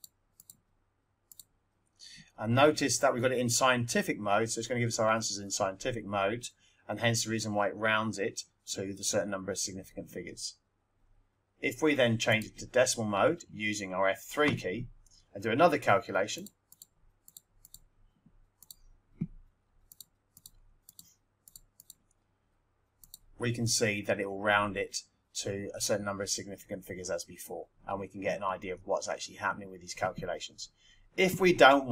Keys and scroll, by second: 0.0-0.8 typing, 1.3 Return, 16.3-18.5 typing, 19.9-21.7 typing, 23.0 Return.